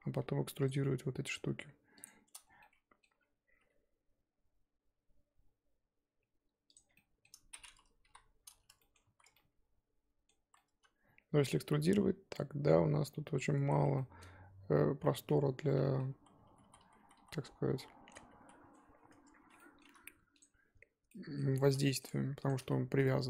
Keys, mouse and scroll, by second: 0.7 click, 0.9-2.0 middle drag, 2.0 shift+click, 2.1-2.4 shift+scroll up 1, 2.4 scroll down 1, 2.6 middle click, 3.1-3.6 scroll up 4, 3.6 e, 6.8 scroll down 3, 6.9 middle click, 7.5-8.0 scroll up 4, 8.0 KP_1, 8.3-8.8 scroll up 2, 8.8 shift+middle click, 9.0 z, 9.3 scroll up 1, 9.3-10.3 middle drag, 10.3 z, 10.5-13.7 middle drag, 13.7 z, 13.9-15.6 middle drag, 15.6 scroll down 1, 15.7 middle click, 16.1 z, 16.6-18.0 ctrl+z, 19.1 Tab, 19.6 middle click, 19.8 3, 20.4 alt+click, 21.1-22.5 middle drag, 22.5 shift+click, 22.7 middle click.